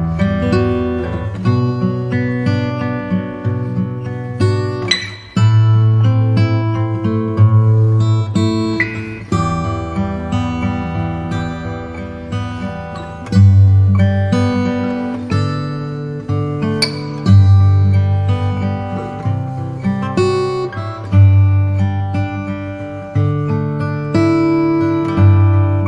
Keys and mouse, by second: 2.9 KP_0, 5.7 g, 9.6 click, 22.9 click, 24.1 click.